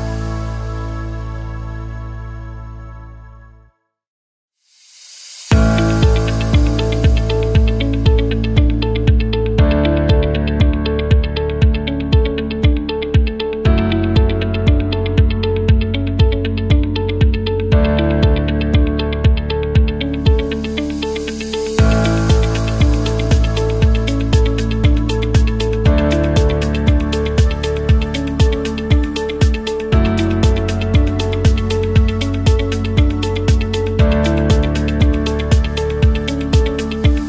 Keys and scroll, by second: 1.2-6.3 typing, 4.5 Return, 14.3 space, 15.4 Delete, 16.6 m, 18.4-19.4 typing, 20.4 space, 22.7-24.8 typing, 26.2 typing, 27.3-28.5 typing.